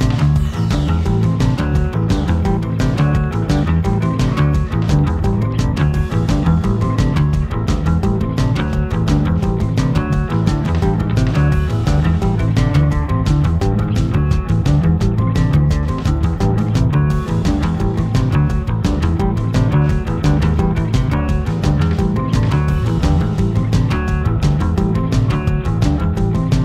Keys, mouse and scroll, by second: 0.0-0.8 typing, 0.3 middle click, 0.5 click, 0.8 middle click, 1.1 middle click, 1.8 shift+middle click, 1.9-14.3 typing, 2.2 middle click, 2.5 click, 2.8 middle click, 3.0 shift+middle click, 3.4 middle click, 4.0 middle click, 4.3 middle click, 4.7 middle click, 5.0 Tab, 5.1 middle click, 5.4 shift+middle click, 5.5 scroll up 2, 5.8 middle click, 5.8 scroll down 5, 6.0 shift+middle click, 6.5 Tab, 7.7 Tab, 7.7 middle click, 7.8 Tab, 8.1 middle click, 8.4 shift+scroll up 1, 8.8 shift+middle click, 9.1 Tab, 9.2 middle click, 9.4 middle click, 9.6 middle click, 9.7-10.3 scroll down 3, 9.8 click, 10.0 shift+middle click, 10.6 click, 10.7 middle click, 10.8 Tab, 10.9 Tab, 11.0 middle click, 11.3 middle click, 11.3 scroll up 3, 11.6 alt+m, 11.7 click, 11.8 shift+click, 12.0 middle click, 12.2 ctrl+e, 12.6 middle click, 12.8 middle click, 13.0 Tab, 13.2 middle click, 13.4 click, 13.7 middle click, 14.0 middle click, 14.1 shift+middle click, 14.6 Tab, 14.7 click, 14.9 middle click, 15.1 scroll down 1, 15.2 scroll up 2, 15.2 shift+middle click, 15.6 shift+middle click, 15.8 shift+d, 16.0 middle click, 16.3 1, 16.4 alt+m, 16.6 shift+middle click, 16.8 click, 17.1 middle click, 17.1 Tab, 17.7 middle click, 17.8 click, 18.1 middle click, 18.1-19.2 typing, 18.2 middle click, 18.4 middle click, 18.6 middle click, 18.6 scroll up 2, 18.7 middle click, 19.1 middle click, 19.4 click, 19.6 middle click, 19.9-20.5 scroll up 2, 20.0 shift+middle click, 20.1 shift+click, 20.3 middle click, 20.5 shift+middle click, 20.8-26.6 typing, 21.1 Tab, 21.1 shift+middle click, 21.6 middle click, 21.7 middle click, 22.0 scroll down 4, 22.3 scroll up 5, 22.4 middle click, 22.7 shift+middle click, 22.9 scroll up 1, 23.2 middle click, 23.4 middle click, 23.7 middle click, 23.9 click, 23.9 middle click, 24.0 scroll up 2, 24.2 middle click, 24.4 Tab, 24.7 middle click, 24.8 scroll down 4, 24.8 middle click, 25.1 middle click, 25.3 middle click, 25.6 middle click, 25.7 Tab, 25.8 middle click, 26.0 middle click, 26.1 middle click, 26.2 ctrl+r, 26.4 click, 26.5 middle click, 26.5-26.6 scroll up 2.